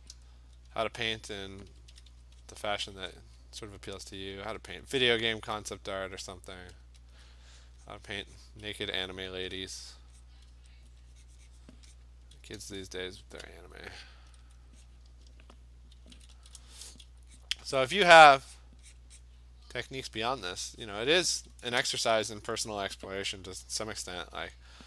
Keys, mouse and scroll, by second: 0.0 click, 0.1-0.7 ], 1.3 alt+click, 1.7 ], 1.9 ], 2.1 ], 2.5 click, 3.0 click, 3.1 click, 4.1 alt+click, 4.3 [, 4.6 [, 5.0 click, 5.4 click, 7.1 alt+click, 7.6 click, 7.9 click, 8.4 click, 8.9 alt+click, 9.3 alt+click, 9.5 click, 10.0 click, 10.2 click, 10.8 alt+click, 11.7 click, 12.0 click, 13.3 click, 14.2 click, 14.5 click, 14.9 click, 16.1 [, 16.3 [, 16.5 [, 17.0 [, 17.4 click, 18.0 click, 18.6 click, 19.0 click, 19.2 click, 19.8 alt+click, 21.4 click, 23.8 alt+click, 24.6 click.